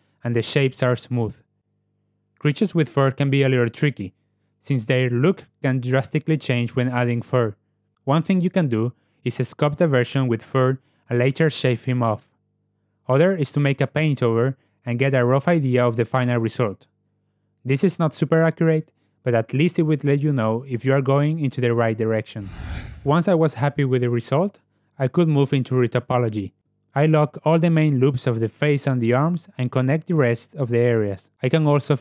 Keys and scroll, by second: 3.7 Tab, 23.2 KP_Decimal, 31.5 Tab.